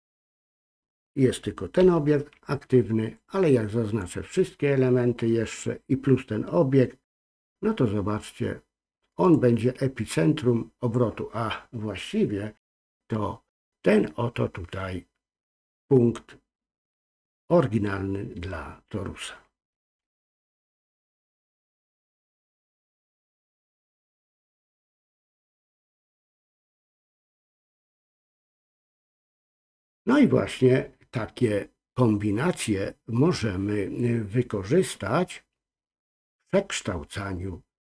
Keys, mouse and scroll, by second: 1.8 ctrl+z, 3.1 click, 9.3-10.9 drag, 22.2-24.1 drag, 25.0 ctrl+z, 27.9-29.6 drag.